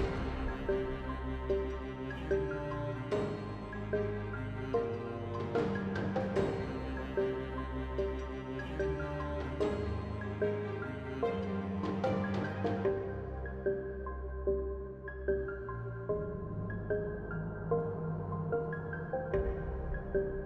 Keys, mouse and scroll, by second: 1.1 Tab, 1.4 z, 3.7 ctrl+Tab, 6.6 i, 9.4 t, 10.7 click, 12.0 t, 13.3 F6, 19.4 F6.